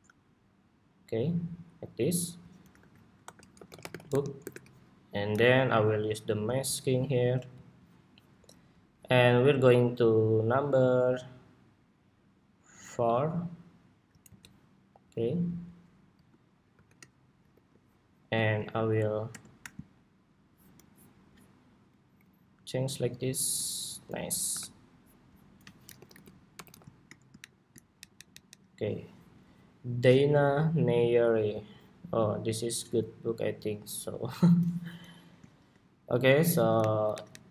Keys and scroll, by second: 2.5 super+g, 2.9 super+r, 14.0 super+c, 16.4 shift+super+v, 17.3 super+2, 24.2 super+=, 36.5 alt+Up, 36.9 alt+Down, 37.1 alt+Down.